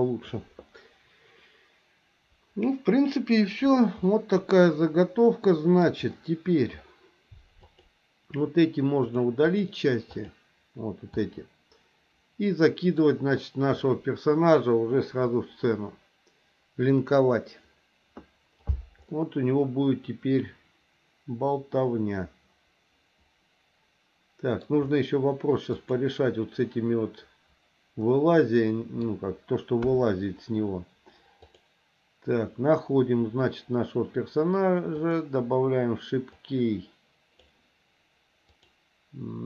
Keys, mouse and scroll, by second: 4.1-5.8 middle drag, 7.6 click, 9.2 click, 10.1 click, 11.2-12.9 middle drag, 19.1-24.7 middle drag, 25.8 click, 28.1 middle click, 29.8 KP_1, 35.0 click, 36.4 click, 38.5-39.4 drag.